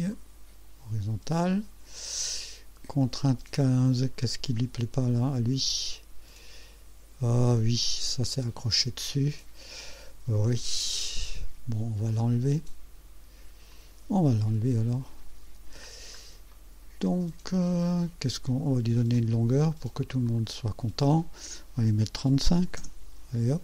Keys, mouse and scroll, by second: 0.1 click, 3.0 right click, 3.6-4.3 scroll down 2, 13.7 click, 14.6 Delete, 15.3 scroll up 2, 15.9 scroll down 2, 16.5-17.0 right drag, 19.1 click, 20.2 click, 22.4 KP_3, 22.5 KP_5, 22.8 KP_Enter.